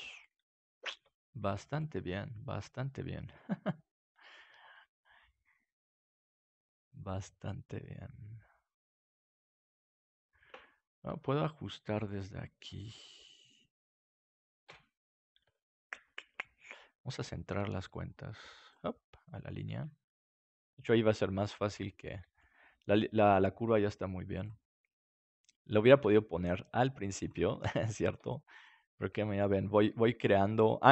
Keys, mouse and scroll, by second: 0.2-1.6 drag, 1.3 ctrl+s, 4.7 g, 9.9-12.2 drag, 11.1 Tab, 14.6 KP_Decimal, 15.1-18.2 middle drag, 17.4 g, 18.6-20.5 drag, 19.8 right click, 20.5 g, 21.7-23.0 drag, 22.6 right click, 22.6 g, 23.2 click, 24.4-25.6 drag, 26.0 g, 26.2 click, 27.5-29.4 drag, 27.7-29.6 middle drag, 29.4 right click, 29.8 g.